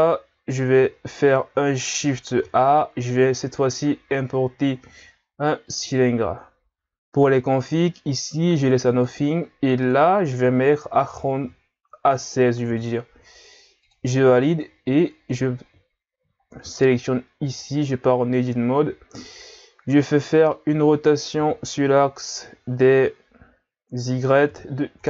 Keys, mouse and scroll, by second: 2.4 shift+a, 7.6-12.8 drag, 16.4-17.5 scroll up 2, 17.5 Tab, 20.1-21.4 middle drag, 21.4 r.